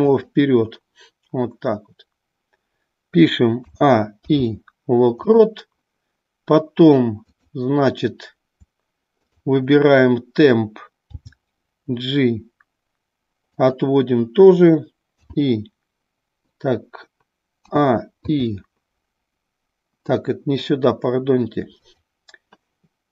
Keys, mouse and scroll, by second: 7.2 click, 18.4 i, 21.8 click.